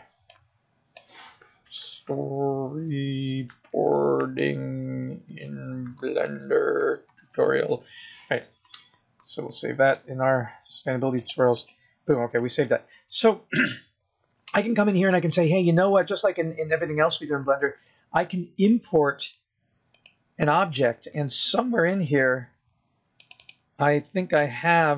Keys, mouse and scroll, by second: 14.9 click.